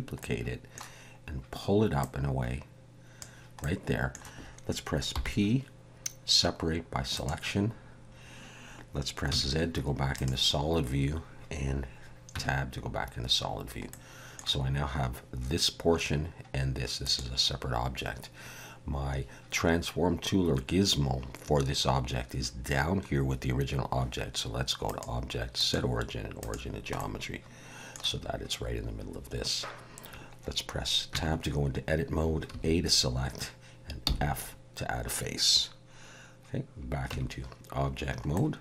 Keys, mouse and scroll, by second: 0.2 middle click, 2.0 click, 3.6 middle click, 5.1 p, 9.3 z, 12.3 Tab, 13.9 middle click, 17.0 click, 24.9 click, 27.0 middle click, 31.1 Tab, 32.5 a, 34.0 f, 37.1 Tab, 38.3 middle click.